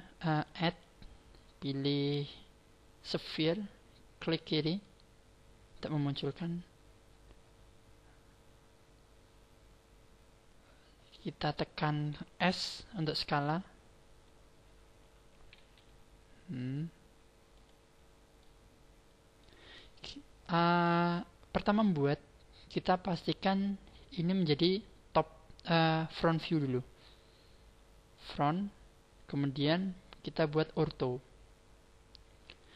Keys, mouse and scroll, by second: 0.6 click, 5.9-6.4 scroll up 5, 6.4 scroll down 1, 6.6 scroll down 5, 6.8 scroll up 1, 7.0 scroll down 1, 7.2 scroll down 1, 7.3 scroll up 1, 7.4 scroll down 1, 7.6-8.0 scroll up 2, 8.0 scroll down 2, 8.4-8.8 scroll up 2, 8.8-11.4 scroll down 3, 9.4-11.4 scroll up 1, 13.2 w, 15.6 s, 17.9-18.4 scroll down 6, 18.4 middle click, 26.6 click, 30.4 click, 32.6 click.